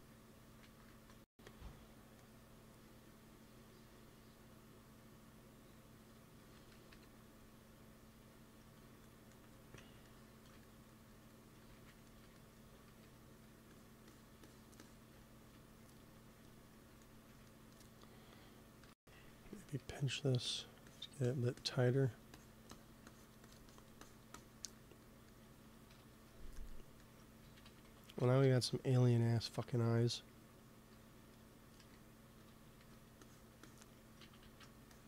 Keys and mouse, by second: 0.5-2.4 drag, 0.8 ctrl+s, 6.8 KP_1, 8.9-10.3 middle drag, 11.6 shift+c, 12.7 f, 13.6-16.5 drag, 17.0-18.7 middle drag, 18.7 p, 19.4 middle click, 19.7 f, 20.4 click, 24.3-25.8 drag, 25.8 KP_1, 27.5 ctrl+z, 27.7 ctrl+z, 27.9 ctrl+z, 28.2 ctrl+z, 28.5 ctrl+z, 31.7 f, 31.8 click, 32.2 f, 32.4-34.8 drag, 32.7 f, 34.3 ctrl+z, 34.5 ctrl+z.